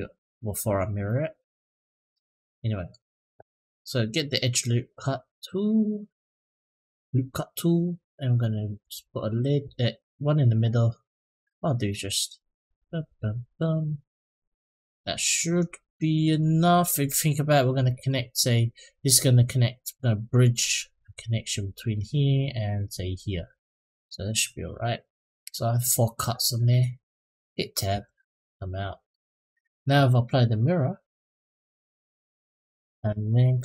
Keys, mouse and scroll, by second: 2.2 middle click, 4.0 click, 8.6 click, 10.9 click, 12.5 click, 12.8 click, 13.3 click, 16.9 middle click, 17.6 middle click, 23.7 middle click, 27.7 Tab, 28.2 click, 28.7 middle click, 29.2 click, 30.7-31.4 drag, 31.9 click, 32.3 middle drag, 33.0 middle drag, 33.4 click.